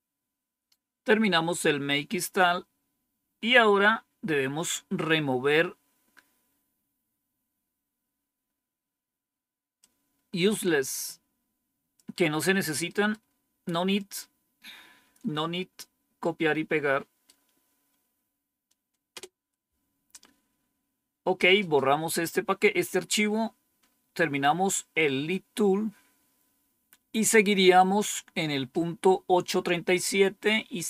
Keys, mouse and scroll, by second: 9.7-11.9 drag, 12.8 right click, 14.1 click, 16.2-17.8 right drag, 19.1 Return, 23.0-23.7 scroll up 2, 23.7-24.4 scroll down 4, 27.2 click.